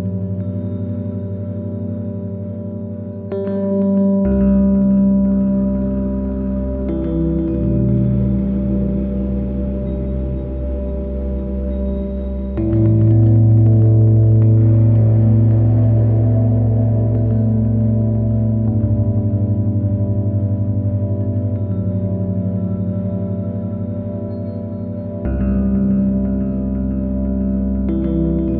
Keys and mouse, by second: 3.9 middle click, 4.0 click, 4.1 middle click, 4.2 click, 4.3 middle click, 7.4 middle click, 8.0 click, 8.9 Tab, 11.9-13.1 drag, 14.8 click, 19.9-22.1 drag, 23.1 n, 24.6 click, 26.2 click, 27.8 shift+a.